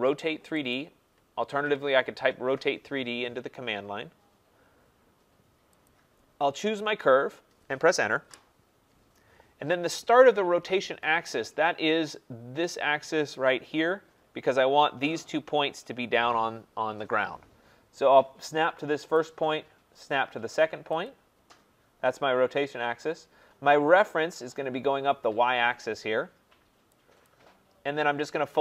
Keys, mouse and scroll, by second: 5.9 click, 8.2 Return, 11.8 Return, 19.2 click, 21.0 click, 27.3 click.